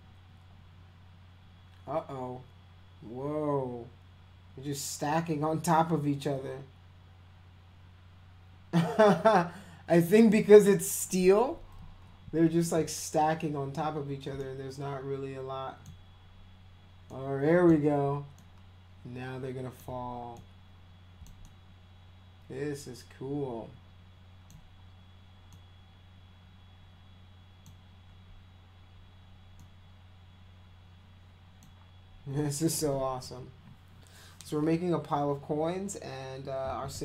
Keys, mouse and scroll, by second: 11.2 drag, 14.4-15.8 alt+middle drag, 17.1 middle click, 18.3-19.7 alt+middle drag, 20.3-21.2 middle drag, 21.4-24.5 alt+middle drag, 25.5-27.6 middle drag, 29.6-31.6 middle drag, 32.3 middle click.